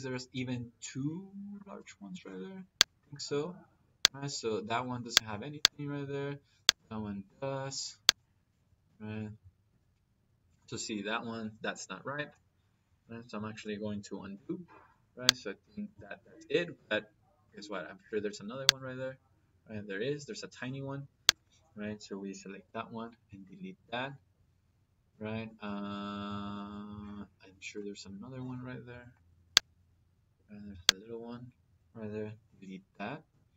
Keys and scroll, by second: 2.0 Delete, 7.0 Delete, 9.5 Delete, 14.2 ctrl+z, 22.5 Delete, 28.8 Escape, 32.4 Delete.